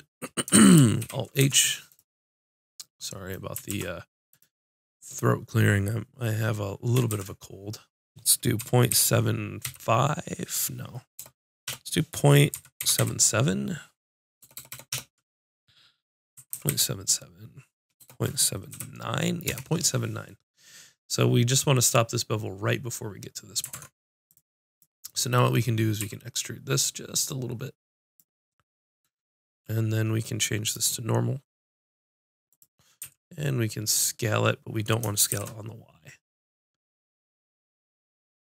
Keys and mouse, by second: 0.5 Tab, 1.0 alt+h, 1.4 Tab, 1.8 click, 3.9 ctrl+r, 7.1 ctrl+b, 23.7 ctrl+Tab, 24.7-25.7 drag, 26.0 e, 28.1 e, 28.2-30.2 drag, 30.6-32.5 drag, 33.0 s.